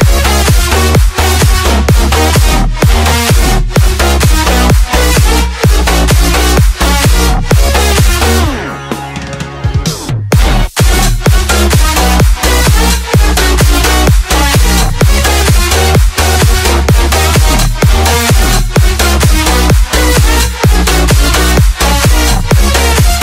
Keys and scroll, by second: 0.0 Caps_Lock.